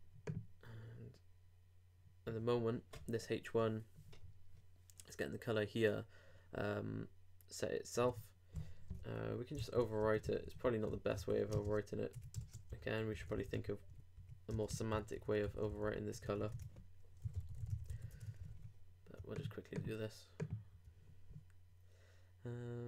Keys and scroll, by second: 8.0 super+Tab, 9.0 super+Return, 10.0 super+Down, 10.6 super+Down, 10.7 super+Right, 10.9 super+Return, 11.5 shift+space, 11.7 shift+p, 12.1 shift+BackSpace, 12.4 shift+[, 12.7 shift+Return, 14.5 shift+BackSpace, 14.7 shift+space, 14.9 shift+b, 17.9 super+;, 18.1 super+Tab, 18.5 super+r.